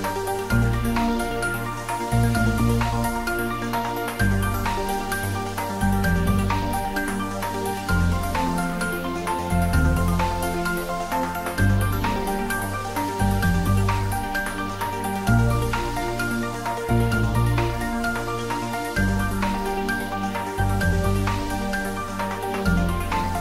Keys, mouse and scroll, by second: 0.4 e, 6.6 click, 6.7 Caps_Lock, 7.1 shift+middle click, 7.6 Tab, 8.0 middle click, 8.5 ctrl+middle click, 8.8 Tab, 9.5 click, 10.5 i, 11.7 click, 11.8 middle click, 12.5 g, 13.8 click, 14.6 s, 15.3 click, 15.6 g, 16.1 click, 16.2 Tab, 16.4 middle click, 17.1 ctrl+middle click, 17.6 shift+middle click, 17.9 ctrl+middle click, 18.2 middle click, 19.2 ctrl+middle click, 19.9 ctrl+3, 20.3 Tab, 20.9 ctrl+r, 21.3 click, 22.2 ctrl+middle click, 22.7 ctrl+r, 23.1 click.